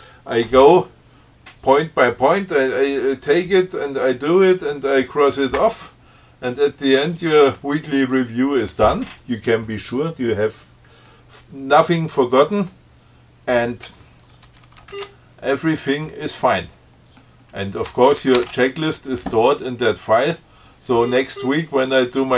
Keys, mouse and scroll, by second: 6.1 scroll down 1, 6.9-7.5 scroll down 4, 8.0 scroll down 2, 15.2 ctrl+g, 16.0 click, 17.3 scroll up 2, 18.5 ctrl+x, 18.6 ctrl+s, 20.7 scroll down 2, 20.9 scroll up 2, 21.6 scroll up 2.